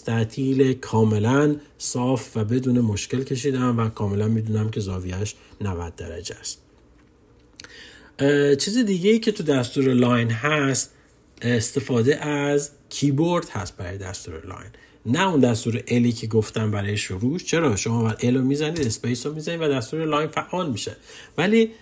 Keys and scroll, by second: 17.8 l.